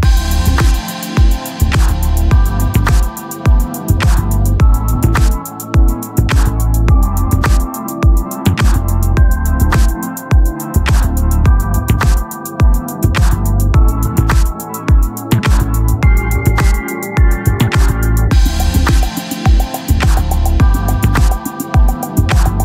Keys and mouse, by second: 1.4 click, 3.2 click, 5.9 click, 8.2 click.